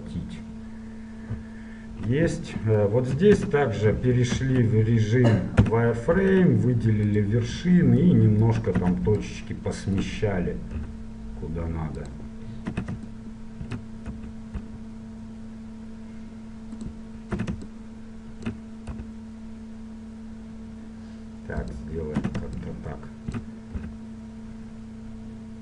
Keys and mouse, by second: 0.9 middle click, 3.6 Tab, 4.6 Tab, 5.8 z, 6.3 ctrl+Tab, 8.9 a, 9.4-11.0 drag, 11.0 g, 13.0 a, 13.2-15.0 drag, 14.4 f, 14.8 g, 17.7 a, 17.8-19.7 drag, 19.2 g, 22.6 a, 22.8-24.5 drag, 24.0 g.